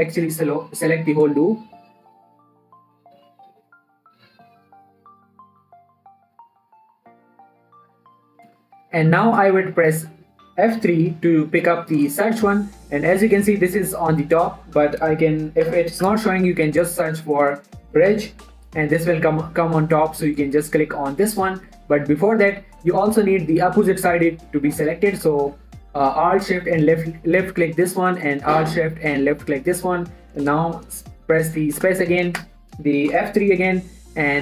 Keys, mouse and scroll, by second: 11.5 F3, 16.0-17.0 typing, 18.9 typing, 22.5 right click, 22.9 scroll down 1, 22.9 middle click, 23.3-23.8 scroll up 1, 23.8 click, 25.9 click, 26.3 alt+shift+click, 29.8 alt+shift+click, 32.2 space, 33.5 shift+Left, 34.2 F3.